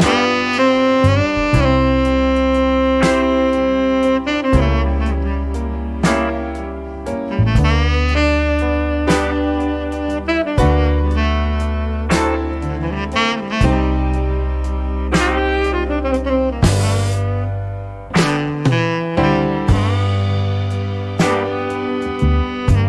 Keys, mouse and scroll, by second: 1.3 click, 4.4 click, 5.8 click, 7.2 click, 9.0 click, 10.9 click, 12.2 click, 12.9 click, 13.9 click, 15.6 click, 16.7 click, 18.1 2, 19.3 click, 20.9 click, 21.5 click, 22.3 0.